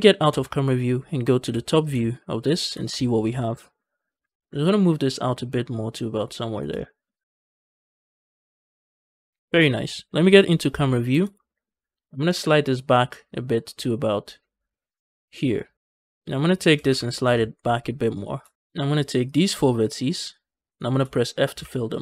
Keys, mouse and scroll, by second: 0.1 KP_0, 1.3 KP_7, 2.4 ctrl+space, 2.9 shift+middle click, 3.2-4.1 scroll up 4, 3.5 shift+middle click, 4.1 g, 4.3 x, 6.4 shift+click, 6.7 shift+middle click, 7.6 middle click, 8.1 z, 8.4 shift+middle click, 8.7 middle click, 10.0 KP_0, 10.8 scroll down 1, 11.0 z, 11.3 shift+middle click, 11.6-12.1 scroll up 1, 12.1 g, 12.3 g, 15.2 click, 16.4 click, 16.6 g, 16.7 g, 18.0 shift+click, 19.1 click, 19.7 shift+click, 20.1 shift+click, 20.6 shift+click, 21.4 f.